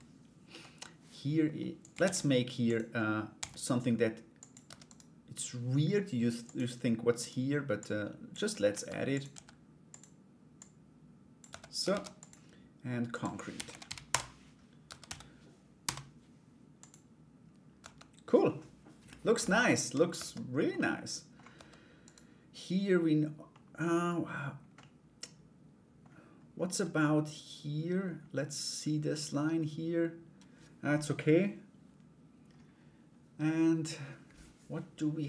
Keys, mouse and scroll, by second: 1.6 shift+a, 2.9 s, 4.2 Tab, 4.4 right click, 6.0 click, 6.7 right click, 7.3-11.0 drag, 11.0 Tab, 11.4 ctrl+a, 12.7-14.1 drag, 14.4 Tab, 14.6 a, 15.4 u, 17.4 Tab, 20.3 middle click, 21.6 right click, 23.1 middle click, 24.3-25.6 middle drag.